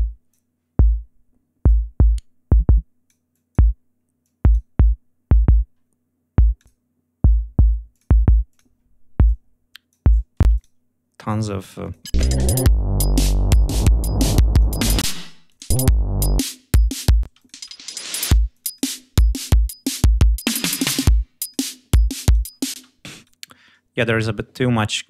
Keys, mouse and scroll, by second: 1.5-3.1 drag, 3.2 click, 4.1 click, 6.4 click, 7.8 click, 8.4 click, 9.1 click, 10.3 space, 10.4 click, 11.7 click, 12.0 space, 12.4 ctrl+scroll up 2, 13.6 scroll up 2, 14.4 click, 14.9 space, 15.4 click, 16.3 click, 17.2 space, 17.3 click, 18.4 click, 20.9 click, 22.1 click, 22.8 space, 23.0 right click.